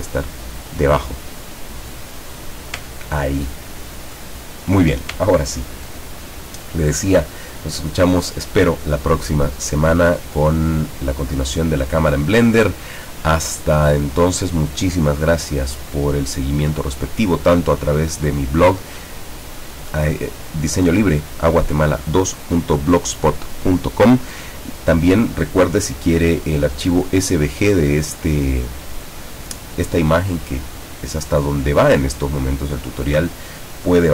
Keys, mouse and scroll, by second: 0.3 click, 0.7 click, 1.1 click, 1.5 click, 2.1 click, 3.1 ctrl+scroll down 2, 5.3 ctrl+scroll down 1, 31.2-31.6 scroll up 1.